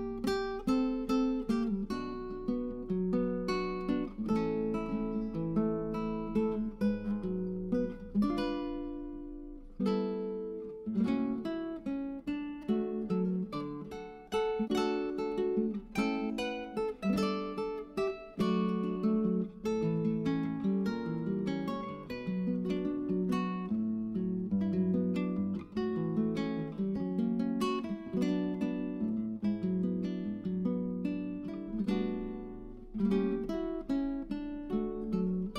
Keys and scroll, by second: 4.7 Tab, 6.5 Escape, 15.6 Tab, 16.1 Tab, 29.1-30.1 typing.